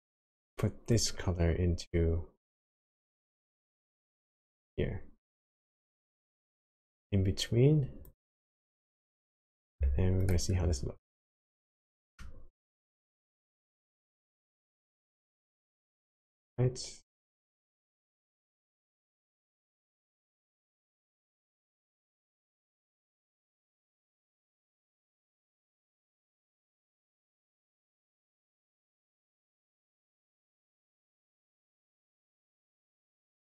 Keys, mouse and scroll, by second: 1.0 click, 6.2 click, 8.9 scroll down 2, 10.3 ctrl+shift+click, 11.0-11.6 scroll down 2, 11.6 middle click, 12.6-13.3 scroll down 2, 13.6-14.7 scroll up 7, 16.1 click, 21.6 click, 32.5 click.